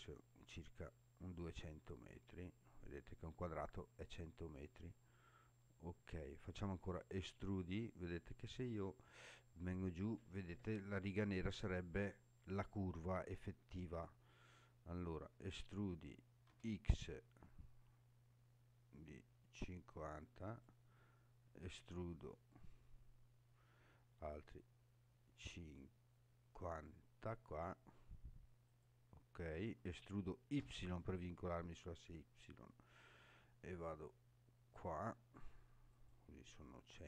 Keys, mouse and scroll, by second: 0.9-1.9 scroll down 2, 2.2 scroll down 2, 2.9 scroll down 2, 4.8-5.1 scroll up 3, 5.6 scroll up 1, 6.8 e, 16.5 x, 20.5 click, 21.6 e, 28.7 click, 29.9 e, 30.6 y, 35.9 click, 36.7-37.0 scroll down 1.